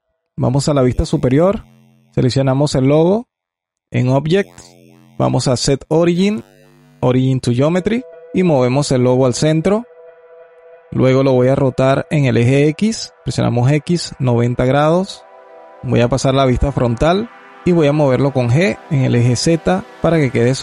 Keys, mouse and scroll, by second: 0.3 KP_7, 1.1 scroll up 2, 1.7 scroll up 6, 1.9 click, 3.0-5.7 drag, 8.1 g, 10.5 alt+click, 11.4 r, 14.5-16.5 alt+drag, 16.5 KP_1, 17.4 scroll up 3, 17.5 g, 19.9-20.6 alt+drag.